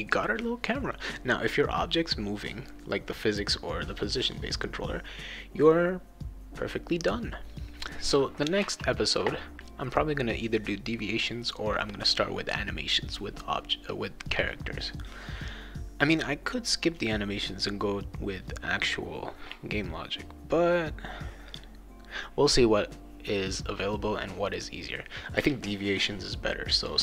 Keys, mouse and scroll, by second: 11.2 click.